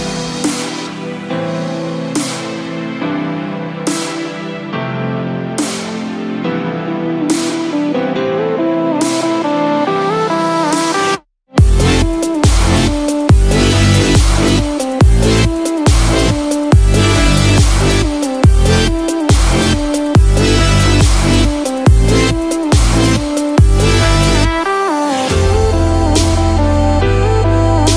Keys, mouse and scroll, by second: 0.3 click, 6.2-6.6 scroll up 5, 7.2 scroll down 1, 7.3 scroll down 2, 7.6 shift+middle click, 8.0 scroll up 2, 8.5 click, 9.7 shift+s, 13.2-13.7 scroll down 4, 17.0 click.